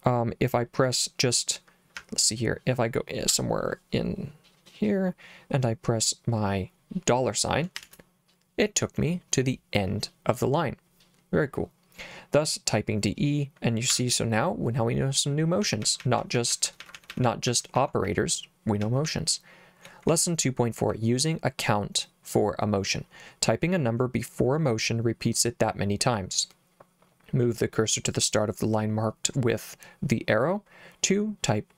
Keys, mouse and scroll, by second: 2.0 h, 7.8 shift+4, 13.9 Escape, 15.6-19.1 typing, 20.1 j.